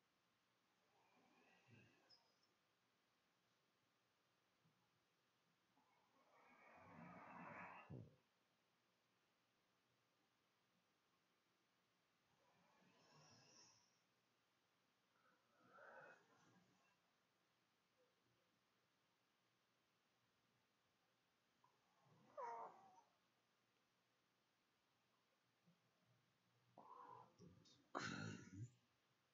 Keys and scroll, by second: 27.4 c.